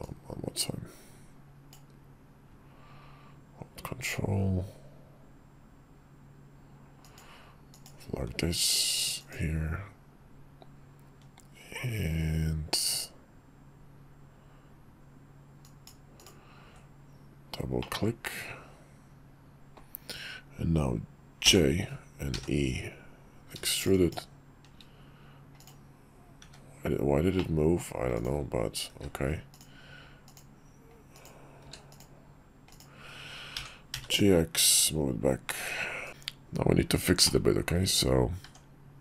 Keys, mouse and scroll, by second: 17.9-24.4 middle drag, 27.1-27.5 middle drag, 27.8 click, 28.6 q, 30.8 click, 31.3 q, 33.3 g, 37.0 middle click, 37.6 Tab, 38.7 Tab, 38.7 click.